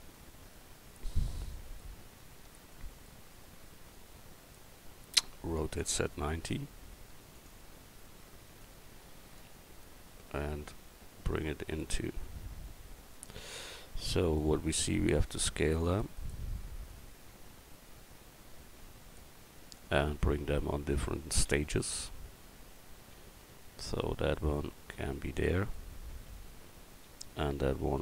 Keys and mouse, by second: 1.3-2.7 drag, 5.6 r, 8.6-9.8 drag, 13.1-14.4 drag, 14.9 s, 16.9-18.4 drag, 20.9 Tab, 21.5 a, 23.1 l, 23.8-25.0 drag, 26.7 a, 27.4 l.